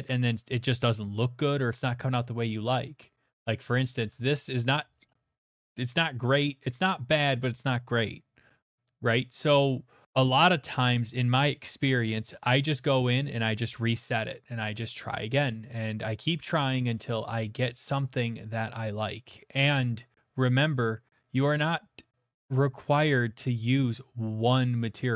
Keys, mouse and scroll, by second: 1.6 click, 3.3 middle click, 3.7 shift+middle click, 3.9 middle click, 4.0 middle click, 4.0 shift+middle click, 4.8 middle click, 5.1 shift+middle click, 6.3 middle click, 7.2 middle click, 13.9 click, 16.9 click, 17.6 middle click, 18.2 middle click.